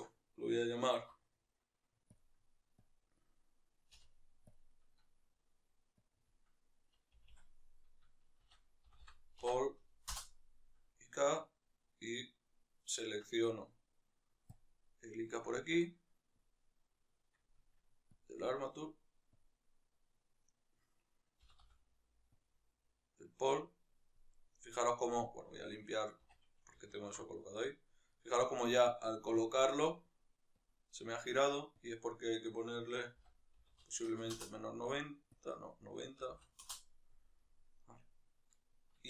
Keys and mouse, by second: 9.9 Delete, 12.4 right click, 13.0 Tab, 17.2 click, 22.3-23.9 drag, 23.9-29.9 middle drag, 24.7 a, 29.9 click, 34.2 Return, 34.2-37.1 drag, 37.1-39.0 middle drag.